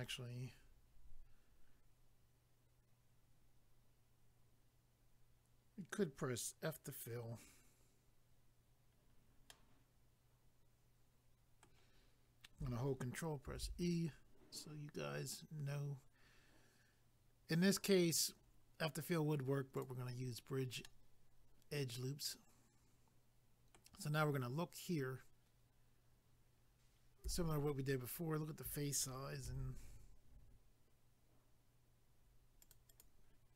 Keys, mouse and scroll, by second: 9.0 scroll down 1, 9.5 middle click, 13.5 ctrl+e, 19.7 click, 19.8 click, 20.8 middle click, 27.2 a, 29.4 ctrl+r, 30.2-30.7 scroll up 1, 32.6 click, 32.7 click, 32.9 click, 33.0 double click.